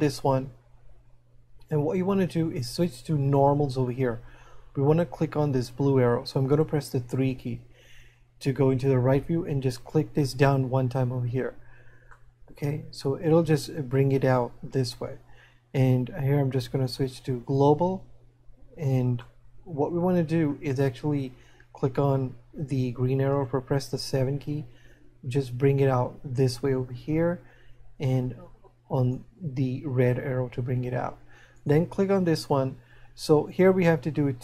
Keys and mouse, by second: 9.9 click, 12.5 middle click, 19.9 middle click, 25.1 click, 28.3 click.